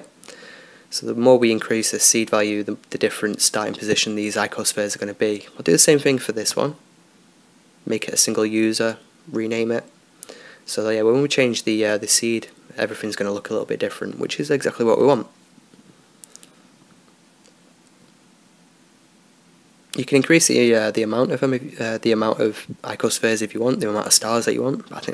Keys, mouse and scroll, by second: 1.8-4.0 drag, 4.0-6.1 right drag, 6.0-8.9 drag, 11.3-14.5 drag, 14.6-16.2 drag, 15.9-17.3 right drag, 17.3-19.1 middle drag, 19.1-20.6 right drag, 22.6-24.3 drag, 23.7 ctrl+s.